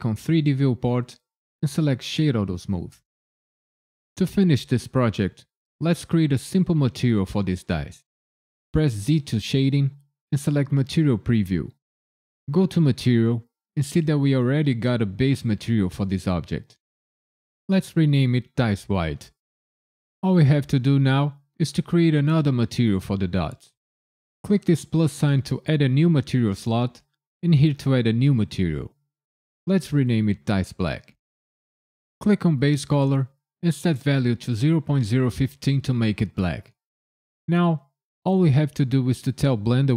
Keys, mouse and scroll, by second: 9.0 z, 13.0 click, 15.3 click, 24.8 click, 27.4 click, 28.4 click, 28.5 click, 32.6 click.